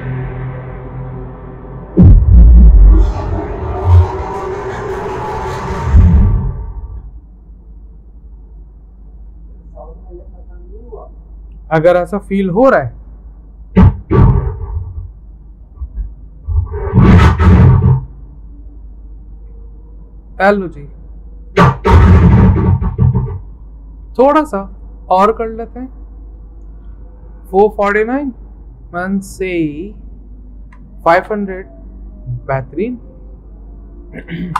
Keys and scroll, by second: 24.2 ctrl+z, 30.4-31.5 typing.